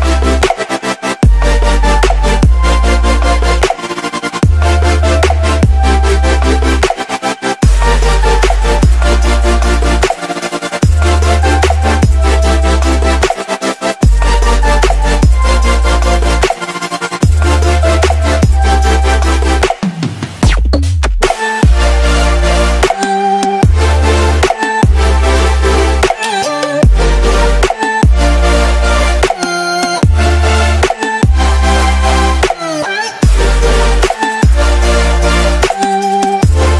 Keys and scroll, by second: 0.2 z, 2.2 x, 2.4 space, 2.6 x, 4.4 space, 6.7 space, 7.3 z, 8.2 ctrl+z, 8.9 ctrl+z, 9.1 x, 9.7 ctrl+z, 11.6 space, 11.9 x, 13.5 space, 13.8 x, 14.7 space, 16.9 space, 17.2 x, 19.0 z, 20.3 space, 21.0 x, 21.8 z, 24.0 x, 25.0-28.1 typing, 29.5 ctrl+space, 31.3 ctrl+space, 31.5-36.4 typing.